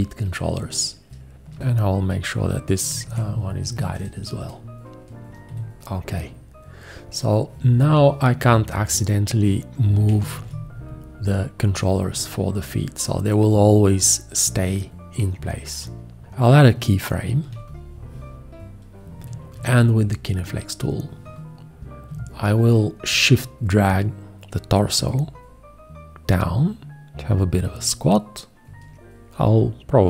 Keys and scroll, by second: 3.0 alt+F3, 5.5 F1, 10.4 ctrl+z, 17.4 x, 19.6 g.